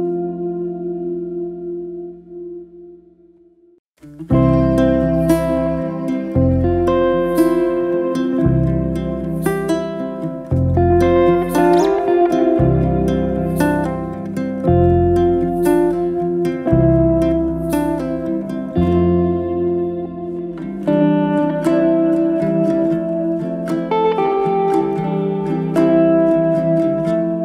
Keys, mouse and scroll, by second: 0.7 Tab, 0.9 click, 1.3 click, 1.5 2, 1.7 click, 2.4 e, 3.6 click, 4.2 ctrl+b, 6.0 Tab, 6.2 right click, 6.7 middle click, 7.5 click, 8.1-9.7 scroll up 1, 10.1-11.6 middle drag, 11.8 click, 12.5-13.0 middle drag, 13.0 scroll down 1, 13.2-14.0 middle drag, 14.0 scroll up 1, 14.2-15.4 scroll down 1, 15.4-16.9 scroll down 2, 17.0 click, 17.6 click, 18.3-20.8 drag, 21.6 g, 24.1-25.3 drag, 25.3 g.